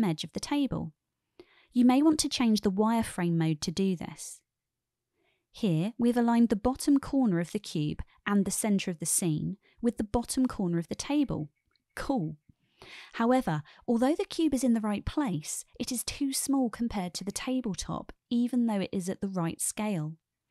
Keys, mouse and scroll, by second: 3.4 click, 4.7 shift+drag, 4.7-5.2 shift+middle drag, 6.3-6.6 shift+middle drag, 7.6-9.9 drag, 9.9-11.1 middle drag, 12.0-12.6 shift+middle drag, 14.0-14.4 shift+middle drag, 15.4-16.7 shift+middle drag.